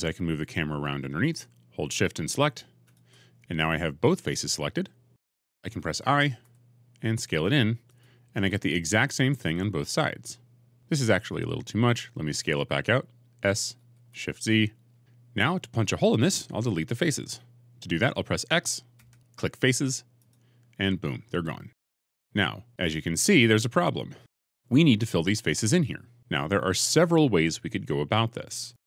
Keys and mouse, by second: 1.0 middle click, 2.7 shift+click, 6.3 i, 7.7 click, 8.2 click, 8.3-9.8 middle drag, 13.7 s, 14.2 shift+z, 18.8 x, 24.1 middle click.